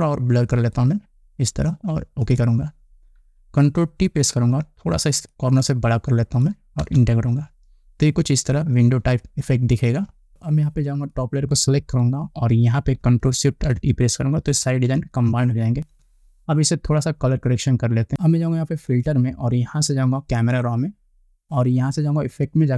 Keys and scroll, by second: 4.8 ctrl+t, 7.5 Return, 10.3 ctrl+0, 15.4 ctrl+alt+shift+e.